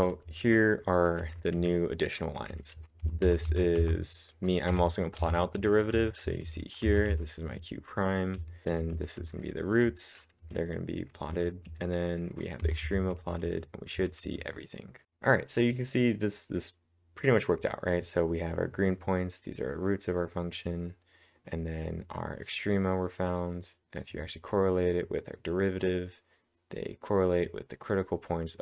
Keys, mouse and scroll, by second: 0.0-0.4 typing, 2.5-7.6 typing, 8.9-10.9 typing, 12.9-13.7 typing.